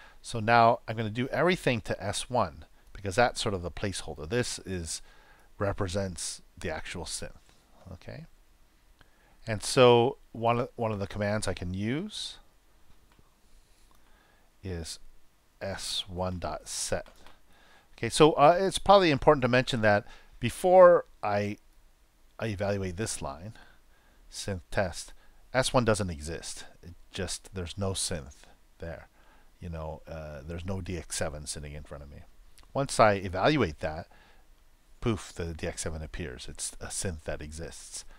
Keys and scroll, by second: 13.5 shift+`.